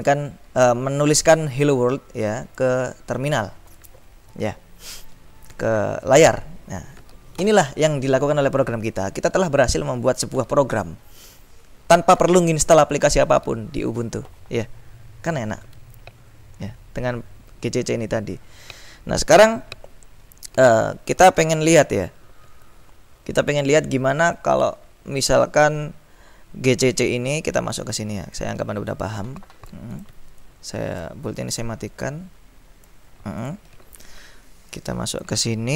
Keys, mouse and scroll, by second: 1.8-3.1 drag, 3.3 click, 28.6 click, 30.1 click, 31.7 click, 33.5 click, 35.5 ctrl+click.